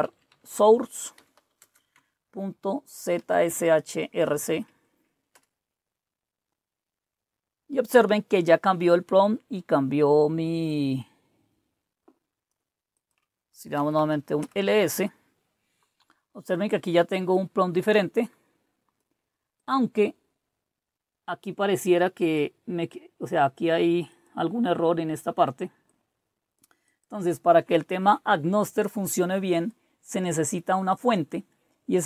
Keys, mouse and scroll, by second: 0.0-3.2 typing, 3.4 Tab, 4.3 r, 4.5 Tab, 5.3 Return, 10.6-13.7 drag, 13.5-14.5 typing, 17.3-19.0 drag, 19.6 click, 22.3-23.6 drag, 24.1 click, 24.3-27.3 drag, 29.5-32.0 drag.